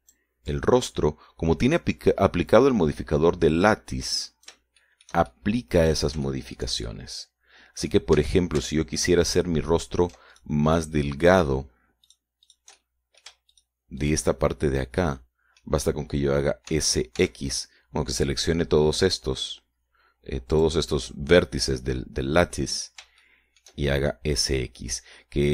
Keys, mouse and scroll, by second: 1.8-6.0 drag, 6.2-8.1 shift+middle drag, 8.2-9.4 shift+middle drag, 9.5 a, 10.6 alt+shift+right click, 11.7 alt+shift+right click, 12.0 alt+shift+right click, 12.6 alt+shift+right click, 13.4 shift+right click, 13.8 shift+right click, 14.1 shift+middle click, 14.8 shift+right click, 15.4 shift+right click, 16.4 middle click, 18.0 s, 18.5 x, 21.9 click, 24.6 shift+middle click, 25.4-25.5 shift+middle drag.